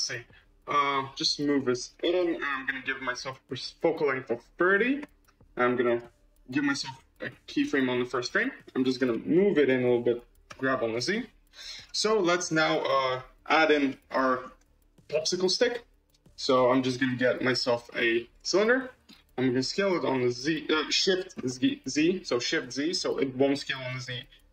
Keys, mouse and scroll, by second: 1.3 g, 2.5 click, 3.6-5.9 drag, 6.6-8.1 drag, 8.9 g, 10.4 g, 12.0-12.6 middle drag, 12.9-13.4 middle drag, 13.8-14.9 shift+middle drag, 14.9 shift+a, 18.5-19.5 middle drag, 19.5 s, 21.4 s.